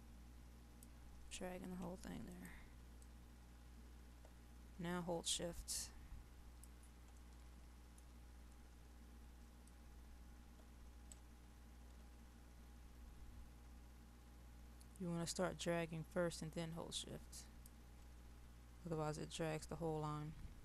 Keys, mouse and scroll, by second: 7.1-8.9 middle drag, 9.8-17.7 drag, 18.6-19.3 scroll up 1, 19.3-20.6 middle drag.